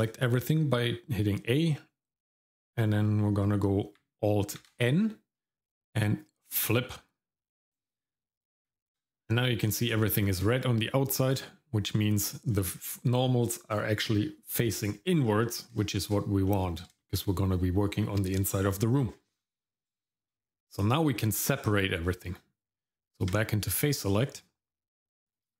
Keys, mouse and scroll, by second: 4.6 alt+n, 8.7 Tab, 10.1-10.4 scroll up 1, 10.5-12.5 shift+middle drag, 15.2-15.7 scroll down 1, 15.8 shift+middle click, 16.5 middle click, 17.0 shift+middle click, 19.3 scroll up 1, 19.6 scroll down 1, 20.0 shift+middle click, 21.5 shift+middle click, 22.0-22.4 scroll up 1, 22.8 Tab, 25.2 click.